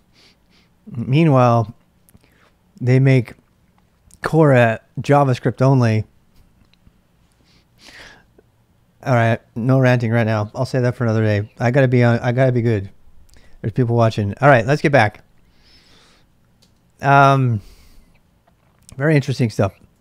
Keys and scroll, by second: 7.9 space, 16.6 space, 17.8-20.0 typing.